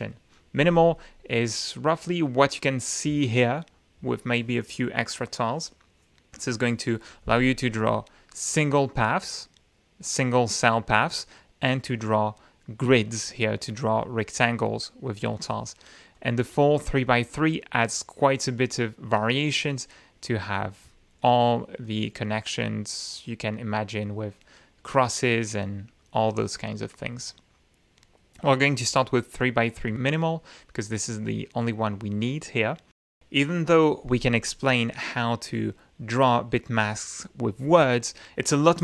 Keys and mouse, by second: 0.6 click, 7.8-9.1 drag, 9.2 right click, 16.1-16.7 drag, 21.8 click, 23.7-24.2 drag, 24.4-24.8 drag, 25.3-26.3 right drag, 27.9 click, 29.2 click.